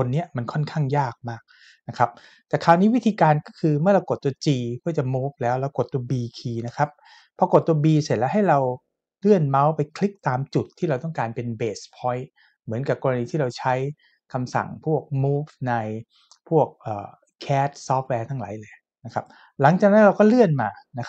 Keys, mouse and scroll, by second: 6.7 b.